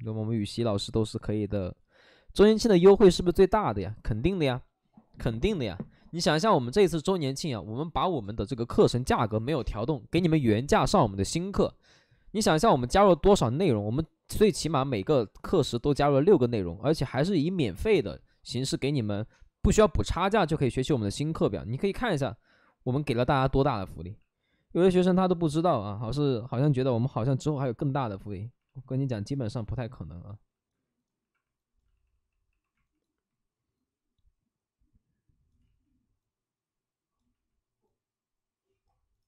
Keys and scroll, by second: 24.1 alt+s, 28.6 alt+s, 29.9 shift+f, 31.1 alt+s, 31.9 shift+d, 32.0 shift+d, 35.6 ctrl+z, 35.6 shift+d, 37.8 ctrl+z.